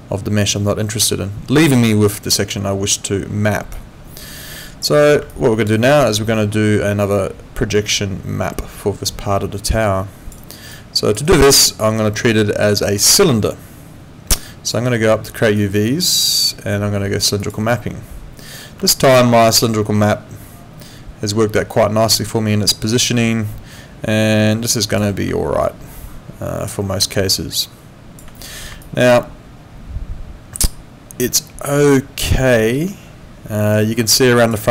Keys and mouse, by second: 3.7 click, 5.3 alt+click, 5.7 alt+right click, 6.0 alt+click, 10.4 alt+right click, 10.7 alt+click, 11.2 alt+right click, 11.5 alt+click, 15.6 click, 17.4 click, 18.9 alt+click, 25.6 click, 28.8 alt+click.